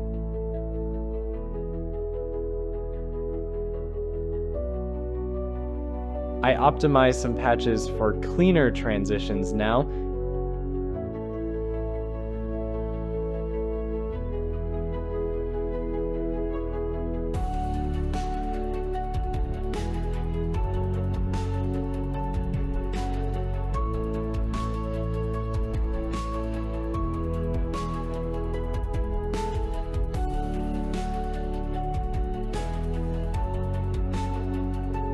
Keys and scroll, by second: 2.0 j, 16.9 Escape, 28.0 shift+i, 28.5 Return, 29.7 Delete.